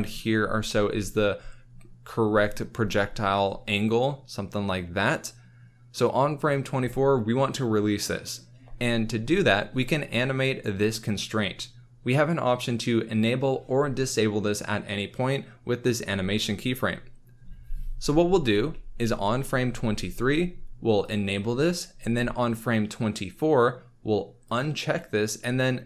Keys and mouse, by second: 0.6 KP_1, 3.7 click, 10.0 click, 19.7 Left, 21.0-22.2 drag, 22.2 Right, 24.4 click.